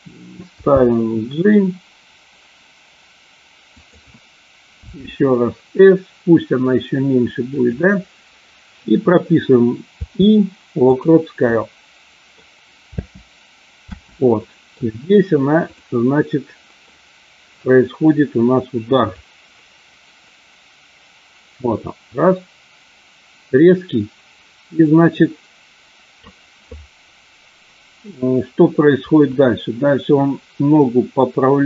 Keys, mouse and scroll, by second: 0.5 g, 3.7 click, 4.8 s, 7.4 click, 11.4-12.3 middle drag, 12.9 space, 13.8 space, 14.4 middle drag, 15.7 click, 16.7 middle click, 19.2-26.3 drag, 29.3-31.6 drag.